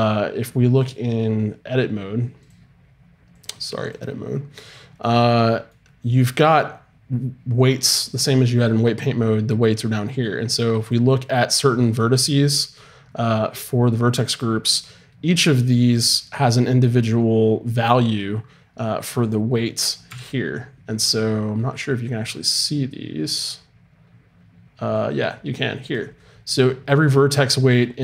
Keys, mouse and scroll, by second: 0.8-2.5 drag, 3.3-5.0 drag, 5.2-7.9 middle drag, 10.8-15.7 drag, 11.9-15.7 right drag, 20.0 n, 21.0-23.6 middle drag, 24.9-28.0 drag.